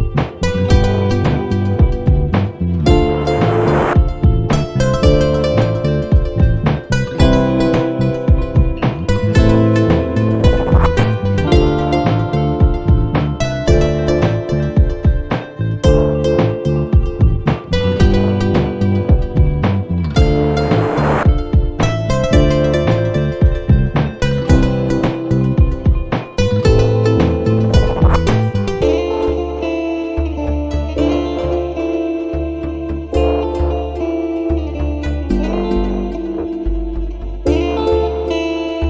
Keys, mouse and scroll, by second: 1.7 =, 3.5 5, 10.4 shift+9, 15.8 click, 16.7 Caps_Lock, 17.3 c, 19.2 click, 21.7 BackSpace, 26.0 click, 30.3-31.9 typing, 32.9 Return, 34.8 click.